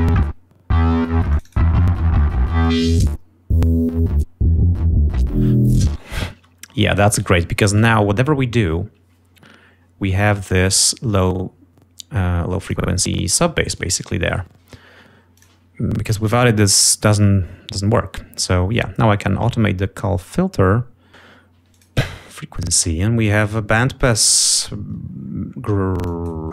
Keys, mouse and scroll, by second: 0.0 ctrl+scroll up 2, 1.4 click, 2.7-6.4 drag, 6.3 space, 12.5 click, 15.1 click, 22.0 click, 23.5 click, 24.3 click, 24.6 click, 25.0 scroll down 1, 25.5 scroll up 1, 26.2 click.